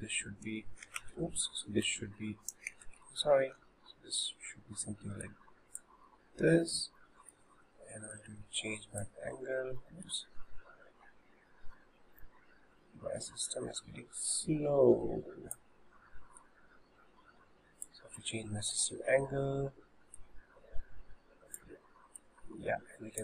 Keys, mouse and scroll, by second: 1.0 ctrl+z, 1.9 h, 2.9 ctrl+z, 3.6 g, 6.2-8.5 middle drag, 8.5 click, 12.1-13.4 shift+middle drag, 14.4 click, 16.4 click, 18.3 middle click, 19.1-20.1 scroll up 1, 20.1 click, 22.2 click.